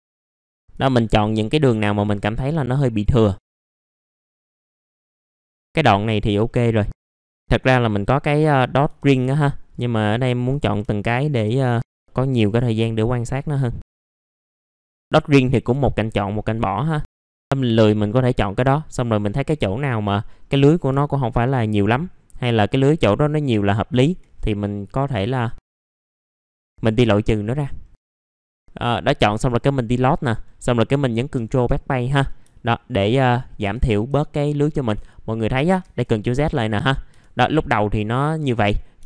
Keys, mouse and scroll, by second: 0.3 middle click, 0.3 scroll down 1, 0.5 middle click, 0.6 scroll up 1, 1.1 ctrl+click, 2.0 ctrl+click, 3.0 ctrl+click, 3.4 ctrl+click, 4.4 ctrl+click, 4.8 scroll down 1, 5.0 middle click, 5.3-6.0 scroll up 1, 6.0 middle click, 6.3-6.6 scroll up 1, 7.0 ctrl+click, 7.2 ctrl+click, 8.5 scroll up 1, 9.7 ctrl+click, 10.6 scroll down 1, 10.9 alt+middle click, 11.8 scroll up 1, 12.0 alt+middle click, 12.6 scroll up 1, 13.8 ctrl+click, 14.5 ctrl+click, 14.6 scroll down 1, 14.8 scroll up 2, 15.2 alt+middle click, 15.9 scroll up 1, 17.1 ctrl+click, 17.7 ctrl+click, 18.5 ctrl+click, 19.0 scroll down 1, 19.6 alt+middle click, 20.2-20.9 scroll up 1, 21.4 ctrl+click, 22.6 ctrl+click, 23.9 ctrl+click, 24.3 scroll down 1, 25.2 alt+middle click, 25.5-25.9 scroll up 2, 25.7 alt+middle click, 26.0 alt+middle click, 26.4-27.1 scroll up 2, 26.5 alt+middle click, 27.4 middle click, 27.6-28.1 scroll down 1, 28.1 middle click, 29.3 click, 31.3 BackSpace, 32.1 middle click, 32.2 scroll down 1, 32.5 alt+middle click, 33.0 middle click, 33.6 F4, 34.1 alt+middle click, 34.8 F4, 35.1-35.6 scroll up 1, 36.6-37.1 scroll up 1, 37.1 F4.